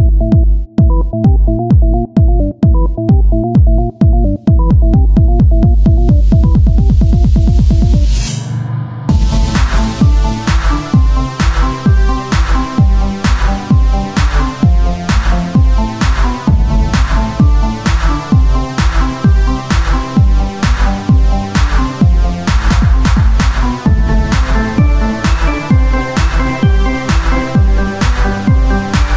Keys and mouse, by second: 0.5 s, 1.9-3.0 drag, 2.8 r, 4.3 KP_1, 4.9 z, 6.6-8.8 drag, 8.8 KP_3, 9.3 middle click, 10.3 r, 13.5 KP_1, 14.5 s, 16.3 Tab, 17.0 ctrl+Tab, 19.3 ctrl+r, 21.2 ctrl+b, 23.3 click, 23.7 c, 24.3-27.3 drag, 27.6 ctrl+z, 28.2 ctrl+r.